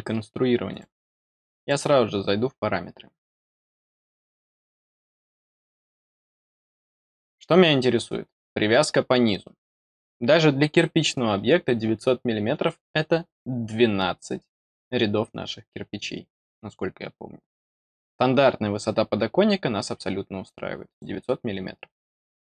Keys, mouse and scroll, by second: 0.6 click, 1.4 click, 8.4 click, 20.4 click.